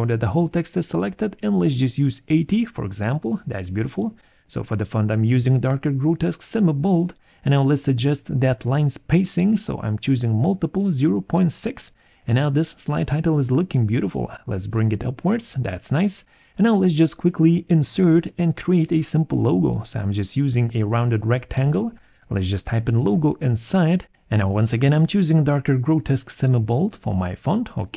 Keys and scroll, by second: 1.4 8, 1.4 0, 1.7 Return, 4.8 alt+5, 8.2 0, 8.4 ,, 18.8 shift+l, 19.1 shift+o, 19.3 shift+g, 19.4 shift+o, 19.8 ctrl+a, 22.4 1, 22.4 2, 23.5 Return, 24.9 Return.